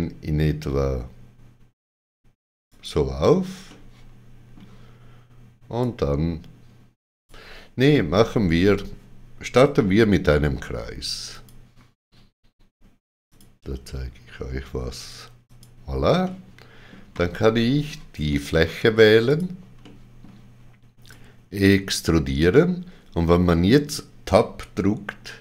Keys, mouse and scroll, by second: 2.6 click, 3.6 middle click, 5.7 click, 11.3 click, 13.2 click, 15.4 click, 16.2 middle click, 18.2 middle click, 19.2 click, 21.1 click.